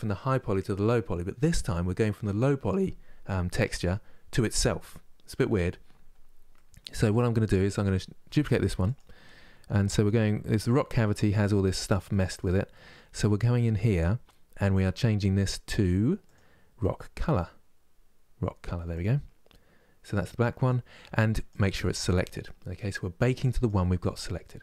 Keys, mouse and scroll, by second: 8.0 shift+d, 8.9-9.9 scroll up 8, 16.0-19.6 drag, 19.6 scroll down 2.